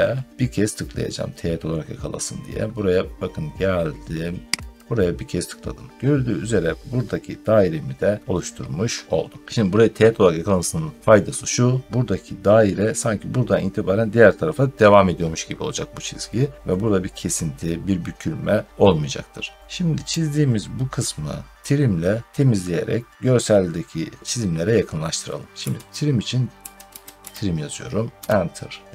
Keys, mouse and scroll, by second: 0.9 scroll, 4.7 click, 5.7-6.0 scroll, 6.2 scroll down 6, 7.0 scroll up 6, 7.2 scroll down 6, 7.4 scroll up 5, 8.2 scroll down 5, 19.4 scroll down 3, 20.0 middle click, 20.6 scroll down 1, 20.6 scroll down 2, 20.8 scroll up 2, 23.1 scroll up 1, 25.5-27.6 typing, 28.1 Return.